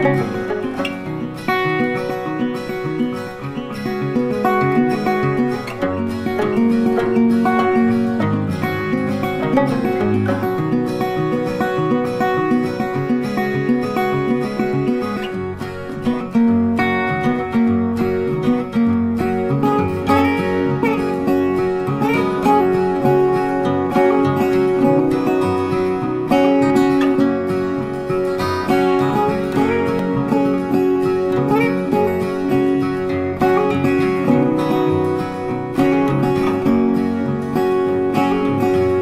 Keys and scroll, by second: 9.0 ctrl+t, 30.4 ctrl+t.